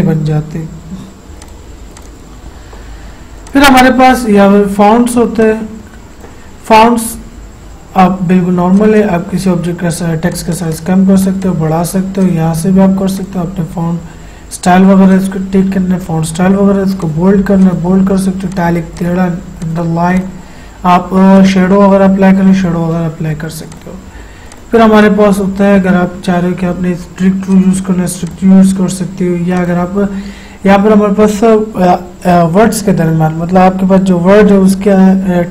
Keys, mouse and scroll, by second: 1.4 click, 5.5-8.7 drag, 8.8 click, 23.7-27.6 drag.